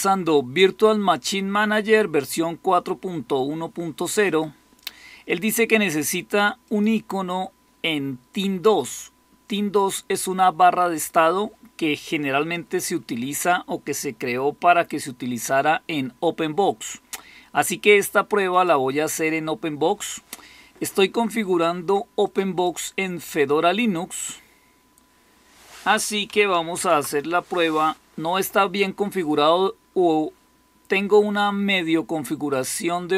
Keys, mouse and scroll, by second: 26.6 super+m.